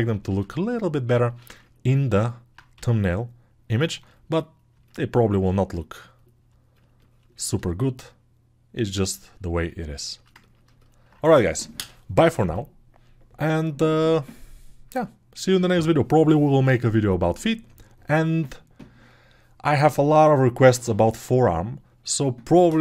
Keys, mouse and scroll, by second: 2.1 alt+q, 2.8 g.